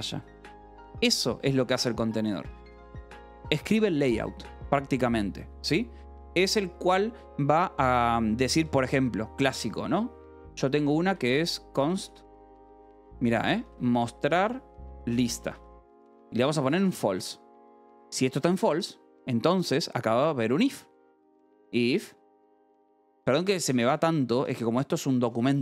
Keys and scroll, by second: 0.9 k, 2.0 shift+v, 2.4 Escape, 9.4-17.8 typing, 17.0 Escape, 18.0 Escape, 19.1-24.8 typing, 22.1 Tab, 23.0 Tab.